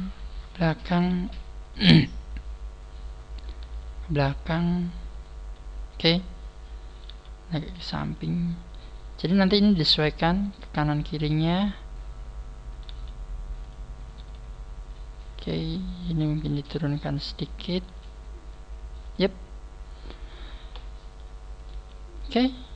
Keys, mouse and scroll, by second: 0.9 right click, 1.1 g, 3.3 right click, 3.6 g, 5.2 click, 5.2 right click, 5.4 g, 6.9 right click, 7.0 g, 8.2 click, 8.6 scroll up 4, 10.3 right click, 10.4 g, 11.6 click, 12.7 right click, 12.9 g, 13.7 click, 14.1 right click, 15.5 click, 17.7 right click, 17.8 g, 19.1 click, 19.4-19.9 scroll down 3, 21.6 right click, 21.7 g, 22.2 click.